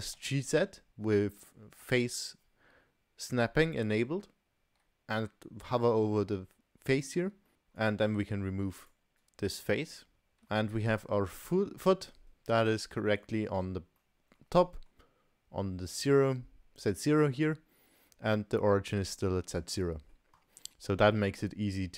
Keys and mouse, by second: 0.2 g, 7.8 click, 8.5 3, 8.9 click, 9.7 Delete, 10.1 click, 10.5 Tab, 12.7-13.2 middle drag, 14.0-14.4 middle drag, 14.6 middle drag, 19.9 middle drag.